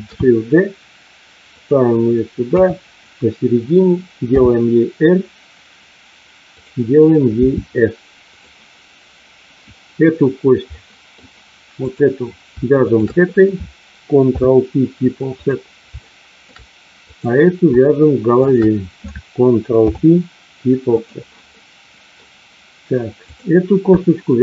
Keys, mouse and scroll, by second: 1.5 click, 2.4 KP_3, 4.3 r, 6.5 click, 7.7 s, 8.3 click, 10.6 middle click, 11.9 click, 12.9 shift+click, 14.3 ctrl+p, 15.9 shift+middle click, 17.0 click, 19.9 ctrl+p, 21.5 middle click, 23.3 click.